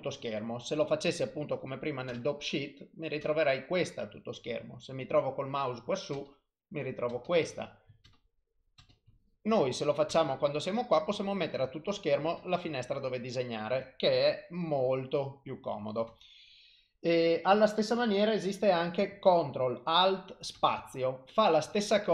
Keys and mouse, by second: 3.3 ctrl+space, 7.2 ctrl+space, 8.9 ctrl+space, 11.5 ctrl+space, 16.2 ctrl+space, 16.2 click.